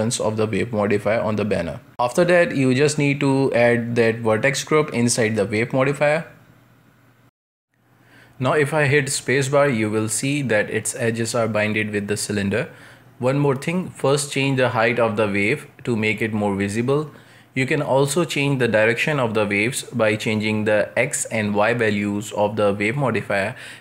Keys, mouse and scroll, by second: 2.8-4.5 drag, 4.5-5.3 shift+middle drag, 5.3-6.5 scroll up 1, 6.5 space, 7.5-8.5 middle drag, 8.5-8.9 scroll down 1, 8.9-15.2 shift+middle drag, 15.2-17.2 drag, 17.2-20.9 middle drag, 20.9-23.8 drag.